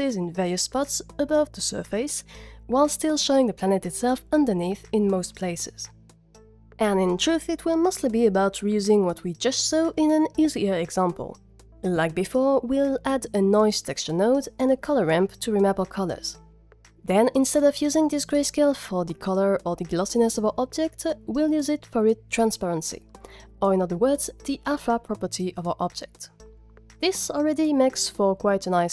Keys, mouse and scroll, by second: 7.6 click, 8.0 middle click, 11.5 click, 11.6 shift+a, 12.7 click, 12.9 shift+a, 14.0 click, 14.4 drag, 14.7 ctrl+shift+click, 15.7 click, 21.7 drag, 24.9 ctrl+shift+click.